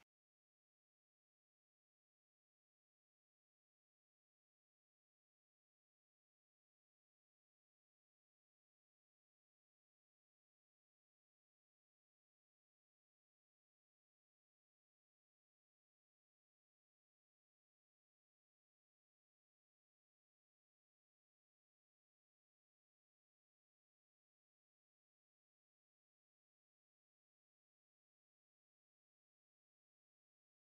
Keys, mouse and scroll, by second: 0.5 click, 1.2 click, 2.0 middle drag, 2.8 click, 3.6 middle click, 4.4 KP_3, 5.6-6.7 drag, 7.4 s, 9.2-10.9 drag, 11.1 middle click, 11.7-13.0 drag, 13.1 middle click, 13.8 middle click, 14.8 s, 15.7 middle click, 16.8 s, 17.3 click, 17.5 middle click, 18.5 click, 19.0 middle click, 20.2-20.9 middle drag, 21.4 s, 23.4 click, 23.8 click, 24.7-25.4 middle drag, 26.4 KP_1, 27.3 r, 29.4 click, 30.3-30.7 middle drag.